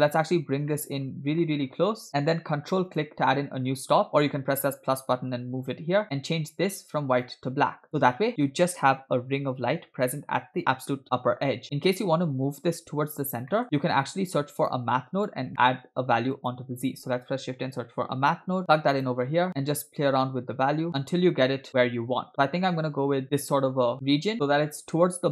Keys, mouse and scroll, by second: 0.8 middle click, 1.9 click, 3.1 ctrl+click, 6.1 click, 13.6 middle click, 13.6-14.3 scroll down 4, 14.4-14.7 drag, 14.9 click, 15.5 middle click, 15.9 shift+a, 19.5-23.2 shift+drag, 23.9 scroll down 3, 24.3 KP_0, 24.8 shift+middle click.